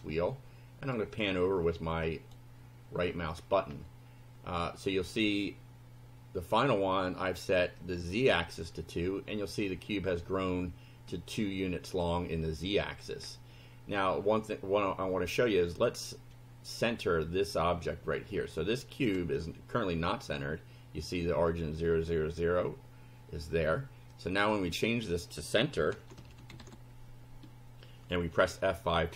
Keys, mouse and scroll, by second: 0.9-2.5 right drag, 3.0-3.7 scroll up 3, 4.4-5.0 scroll down 4, 7.8 click, 13.2 scroll down 2, 24.2-25.2 drag, 25.5-27.1 typing.